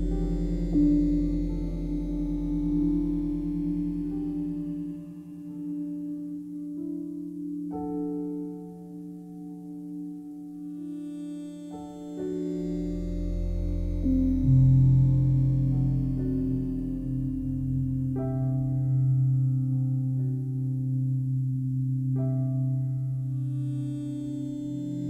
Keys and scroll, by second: 0.2 1, 0.6 0, 1.1 Return, 14.2 0, 15.0 7, 15.4 Return.